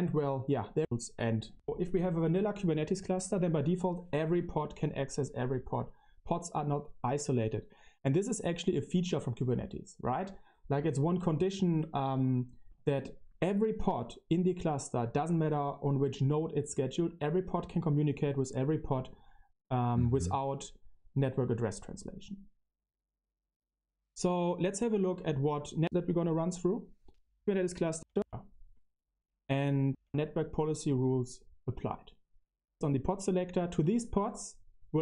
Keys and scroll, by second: 0.7 Tab, 1.5 Tab, 28.1 Tab, 29.8 Tab, 32.6 Left.